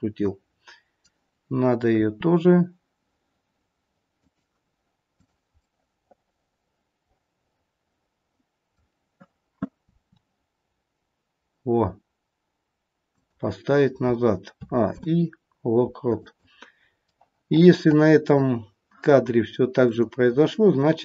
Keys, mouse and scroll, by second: 2.0 r, 5.2 click, 5.5 middle click, 9.7 r, 14.6 a, 14.9 i, 17.1 middle click, 19.8 click.